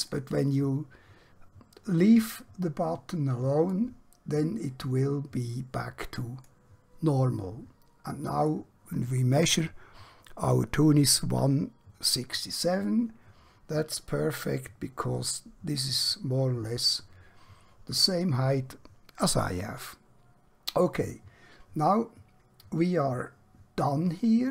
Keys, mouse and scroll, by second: 8.9 click.